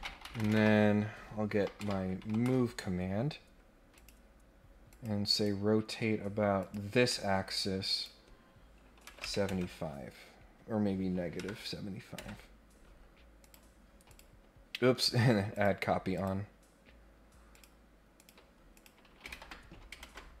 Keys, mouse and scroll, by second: 3.9 click, 4.9 click, 5.3 click, 6.5 click, 7.1 middle click, 7.9 click, 13.4 click, 14.1 click, 14.9 scroll down 1, 15.5 click, 16.1 click, 17.5 click, 18.1 click, 18.7 click, 20.0 ctrl+Tab.